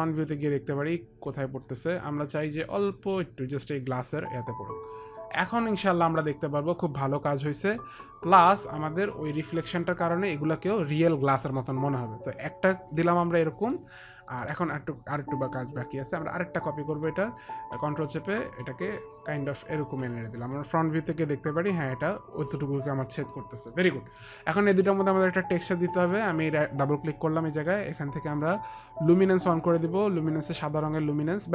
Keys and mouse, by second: 0.1 middle click, 3.4 click, 5.9 middle click, 6.2 middle click, 6.2 click, 7.9 click, 10.4 click, 13.8 middle click, 14.6 middle click, 16.0 click, 18.3 ctrl+click, 18.8 ctrl+click, 20.4 middle click, 20.8 middle click, 23.7 middle click, 24.3 middle click, 26.0 click, 27.8 click, 27.8 middle click, 29.8 click.